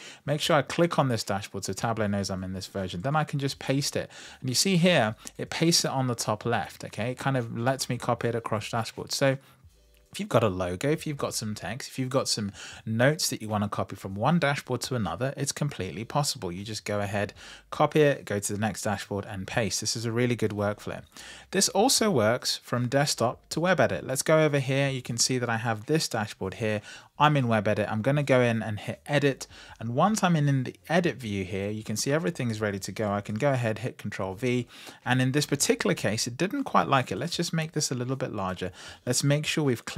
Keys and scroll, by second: 2.8 super+v, 33.1 super+v.